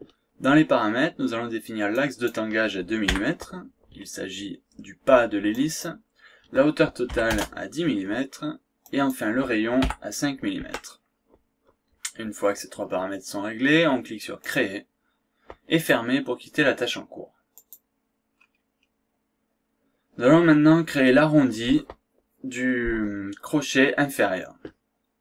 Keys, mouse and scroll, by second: 1.9 click, 3.1 KP_2, 5.5 click, 7.1 KP_1, 7.3 KP_0, 8.8 click, 9.8 KP_5, 10.6 Tab, 14.5 click, 15.7 click, 17.5 click, 18.4 scroll down 1, 18.7-19.0 scroll up 2.